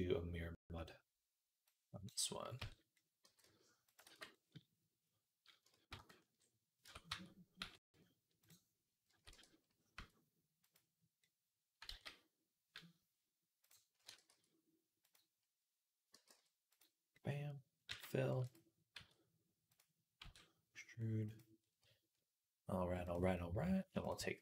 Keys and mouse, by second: 2.4 Tab, 3.1 g, 3.9 ctrl+z, 5.8 ctrl+z, 6.7 Tab, 6.9 a, 7.5 x, 8.9 a, 9.2 e, 11.7 ctrl+z, 13.9-20.1 drag, 13.9 e, 16.0 g, 17.7 f, 18.2 e, 18.8 s, 20.1 e, 21.4-22.9 middle drag, 22.9-24.4 drag.